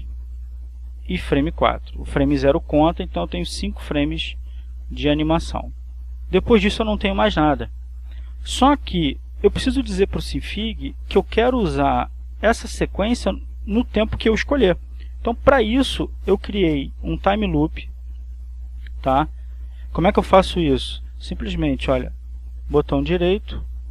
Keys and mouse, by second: 0.7 click, 2.8-5.4 drag, 6.6-14.1 drag, 18.1 click, 22.5-23.5 drag, 22.8 right click.